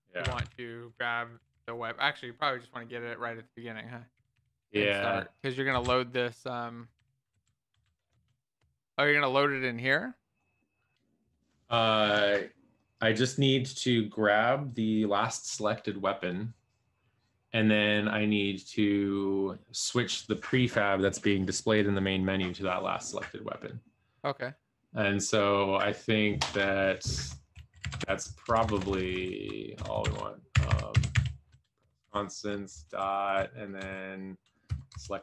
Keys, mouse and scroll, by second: 0.0-4.8 typing, 5.7 Down, 5.9-7.8 typing, 8.2 ctrl+space, 8.6 Return, 9.6 shift+9, 27.8-28.5 typing, 30.0-31.6 typing, 31.8 Return, 32.9 Down, 33.1 Down, 33.3 Down, 33.8 Down, 34.9 Return, 34.9 Right.